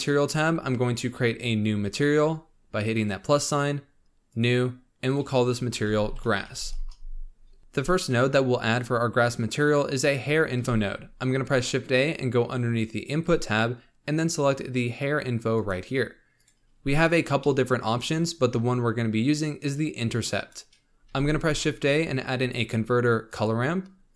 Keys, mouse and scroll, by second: 0.1-2.9 scroll up 23, 2.9-6.6 drag, 6.6 s, 7.6 shift+a, 10.5 shift+a, 16.7-17.3 scroll up 1, 17.3 middle click, 17.9-19.4 drag, 21.1 shift+a.